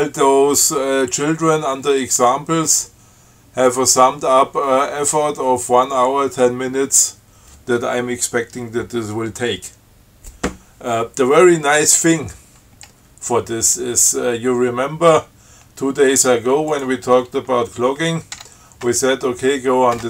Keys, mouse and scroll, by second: 17.0 click, 18.6 q.